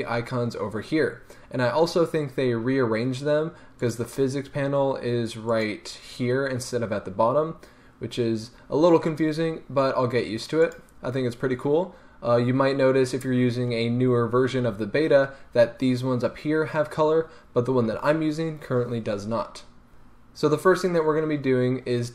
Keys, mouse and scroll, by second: 3.8 click, 5.5 click, 10.6 click.